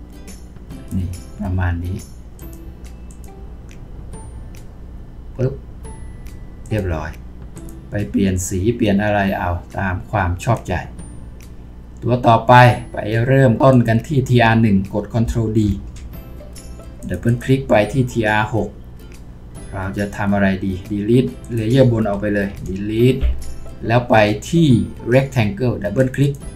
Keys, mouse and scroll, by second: 15.6 ctrl+d, 17.3 double click, 22.5 Delete.